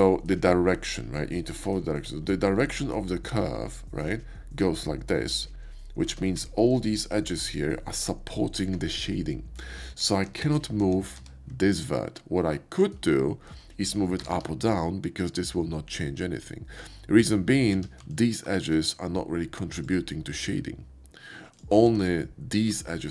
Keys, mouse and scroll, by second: 2.3-3.9 shift+middle drag, 6.1 Tab, 6.7 click, 9.8 ctrl+z, 10.3 ctrl+z, 10.7 ctrl+z, 14.1 g, 17.2 click, 17.8 Tab, 18.6 x, 19.8 click, 21.5 alt+click, 21.9 x, 22.0 click, 22.7 alt+click.